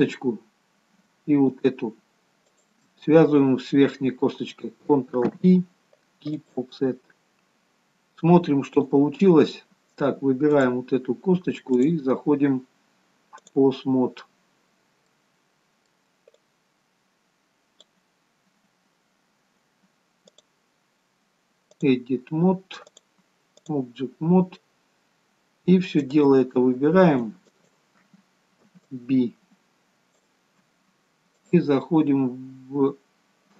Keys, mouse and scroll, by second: 1.8 shift+click, 2.7 shift+click, 5.5 ctrl+p, 9.1 click, 15.1-16.3 scroll down 2, 15.4 middle click, 16.7 click, 18.7-19.7 scroll up 1, 19.7-20.6 scroll up 1, 20.6 click, 26.4 click, 29.0 b, 31.6 click.